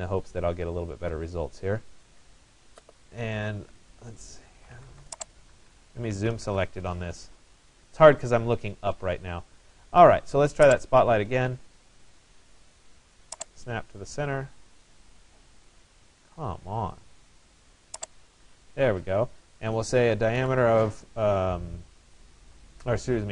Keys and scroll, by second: 1.9 Escape, 6.2 Return, 19.9 1.